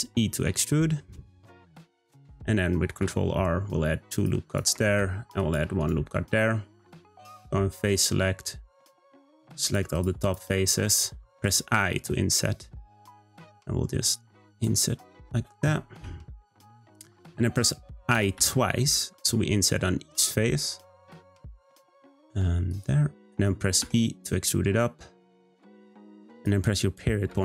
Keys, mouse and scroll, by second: 2.9 r, 4.9 r, 7.9 click, 9.0 shift+click, 9.3 shift+click, 9.6 shift+click, 9.9 shift+click, 10.2 shift+click, 14.9-15.3 scroll up 2, 16.3-18.1 shift+middle drag, 18.1 i, 23.8 e, 27.3 ..